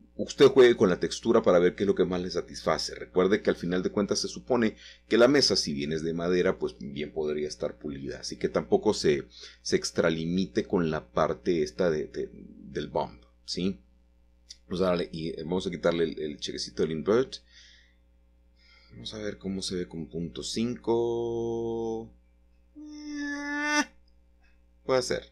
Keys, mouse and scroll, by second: 0.4-1.3 scroll up 1, 1.6-3.0 ctrl+middle drag, 3.7 click, 7.6-8.5 scroll down 3, 9.1-11.2 middle drag, 13.5 click, 15.5 click, 17.8 typing, 19.2-20.2 scroll down 2, 20.2-20.8 scroll up 2, 20.8-21.5 scroll down 2, 21.5-21.9 scroll down 1, 21.9-22.4 scroll up 2, 23.8 click, 25.0-25.3 typing.